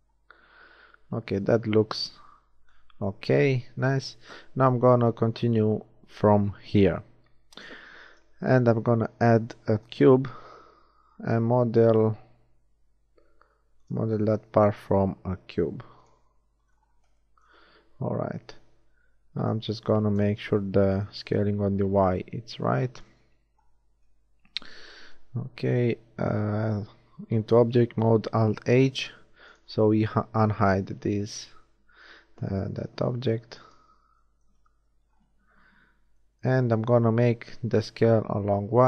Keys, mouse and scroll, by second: 1.6 z, 3.2 z, 8.0 shift+a, 12.1 s, 14.1 g, 17.8 s, 20.1 KP_3, 25.2 shift+Tab, 28.3 alt+h, 32.6 KP_3, 34.7 Tab, 37.7 s.